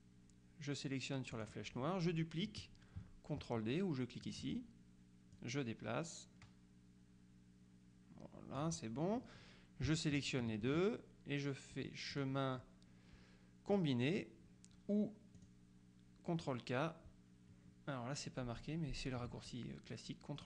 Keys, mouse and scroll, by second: 1.4 click, 4.3 click, 5.4-9.1 drag, 10.0 shift+click, 12.2 click, 13.8 click, 15.4 click.